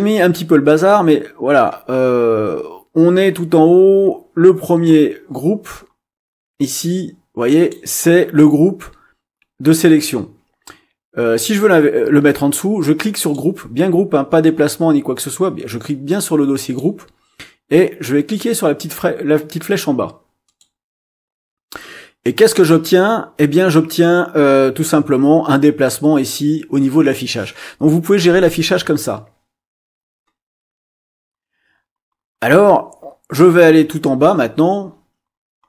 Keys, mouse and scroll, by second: 1.8-2.4 scroll up 2, 2.5-3.5 scroll up 6, 3.9-5.6 scroll up 8, 5.7 scroll up 2, 6.3 scroll up 2, 7.5 click, 13.1 click, 16.5 click, 20.5 click.